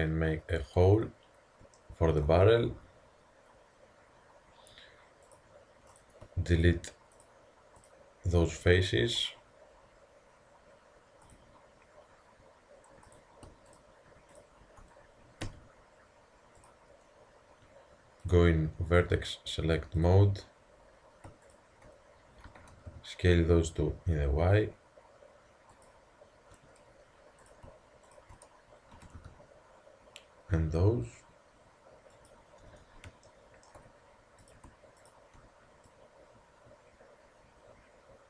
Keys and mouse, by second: 1.2-5.2 middle drag, 5.3-9.7 drag, 10.2-13.1 middle drag, 13.1-16.1 drag, 15.5 x, 18.3-25.7 drag, 22.6 s, 27.5-31.9 drag, 29.0 s, 33.3-33.8 middle drag, 34.5-37.8 drag.